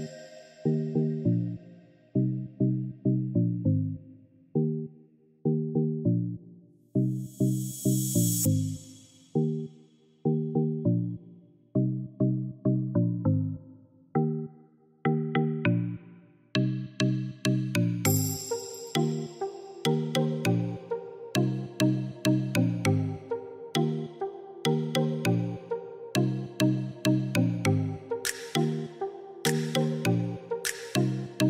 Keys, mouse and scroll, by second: 6.4-7.9 middle drag, 7.9 click, 9.1-11.7 drag, 11.7-17.4 middle drag, 17.4 click, 19.6 click, 21.1-24.2 drag, 27.2 click.